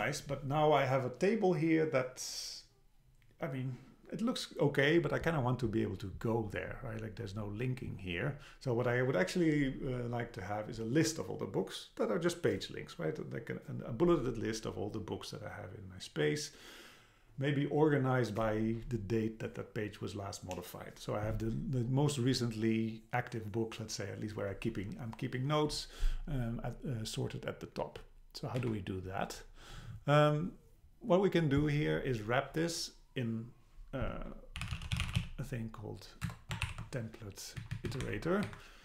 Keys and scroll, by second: 28.6 Down, 36.3 Return, 37.6 Down, 38.1 Left, 38.5 Right.